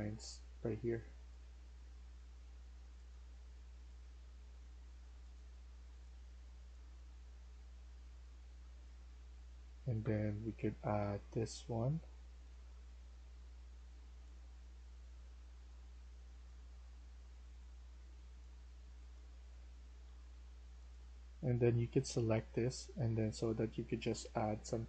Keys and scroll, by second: 0.0-0.5 typing, 8.3-11.4 typing, 19.1-20.2 typing.